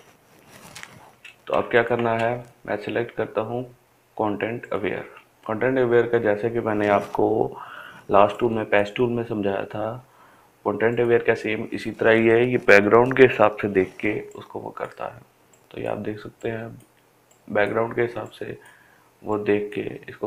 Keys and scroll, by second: 1.9 ctrl+space.